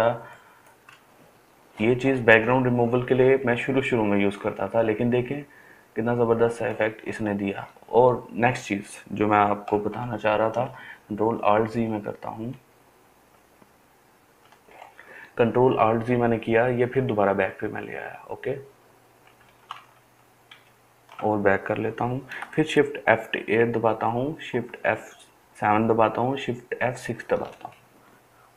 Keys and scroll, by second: 10.6 ctrl+alt+z, 11.7 ctrl+alt+z, 19.8 ctrl+alt+z, 20.6 ctrl+alt+z, 23.1 shift+F8, 24.6 shift+F7, 27.0 shift+F6.